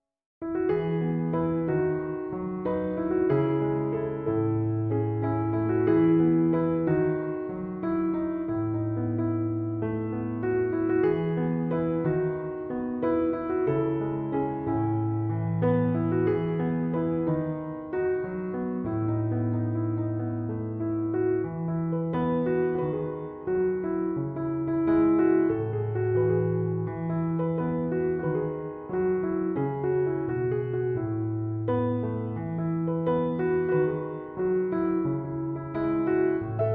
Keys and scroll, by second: 7.2 Return, 17.6 m, 17.7 o, 18.1 v, 18.2 e, 30.4 3, 30.6 0, 30.8 Return.